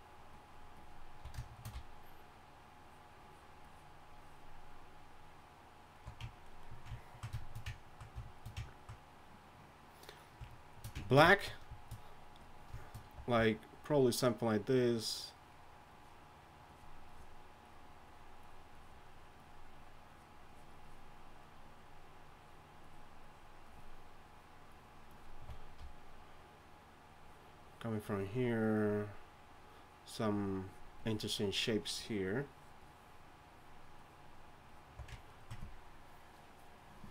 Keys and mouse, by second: 0.0-4.8 typing, 6.0 d, 6.0 d, 6.0 d, 13.1 d, 13.4-25.4 d, 25.8-34.9 d.